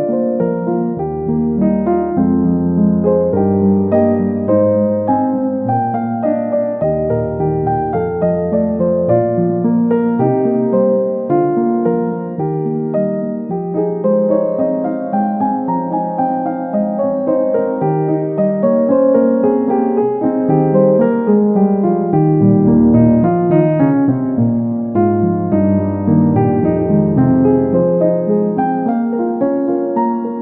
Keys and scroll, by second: 6.4 ctrl+z, 26.5 ctrl+c, 26.6 ctrl+v.